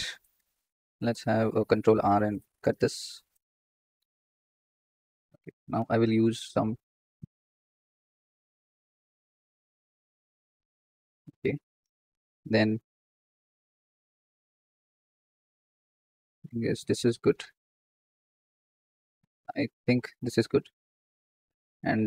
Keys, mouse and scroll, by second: 0.7 ctrl+r, 3.2 click, 3.9 x, 5.7 ctrl+r, 12.2 ctrl+r.